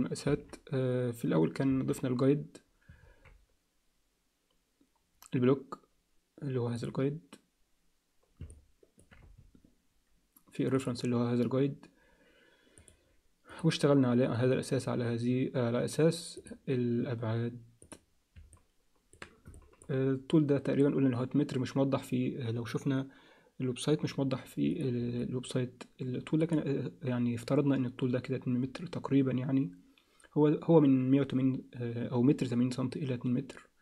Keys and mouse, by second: 0.2 KP_1, 1.6 KP_3, 3.0 alt+a, 6.7 click, 8.5 alt+middle click, 9.2 z, 10.7 click, 12.8 click, 13.5 click, 16.4 click, 17.8 click, 18.5 alt+middle click, 19.5 alt+shift+middle click, 24.7 click, 25.2-26.4 alt+middle drag.